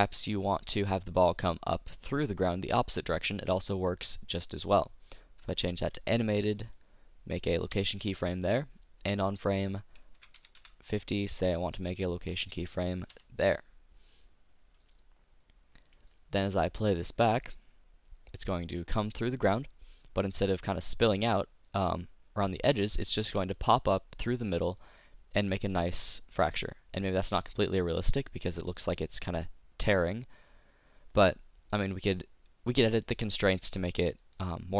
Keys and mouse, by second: 0.9-4.8 drag, 4.8 middle click, 5.6-7.4 drag, 7.8 i, 9.0-11.0 drag, 11.8 click, 13.1 click, 13.1 i, 14.8-16.9 drag, 16.9 middle click, 17.4-19.2 drag, 21.8-23.3 middle drag, 23.3 click, 24.8-26.5 drag, 27.5-30.9 drag, 33.5 middle click, 33.9 click, 34.3-34.7 middle drag.